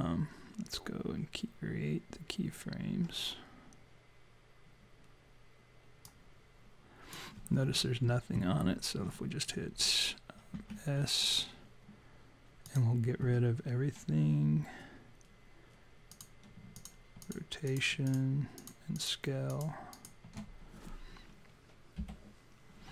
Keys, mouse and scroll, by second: 6.1 click, 10.6 s, 12.7 click, 16.1 click, 16.7 shift+click, 17.2 click, 17.7 click, 18.1 shift+click, 18.6 click, 19.0 click, 19.5 shift+click, 19.9 shift+click, 22.0 Delete.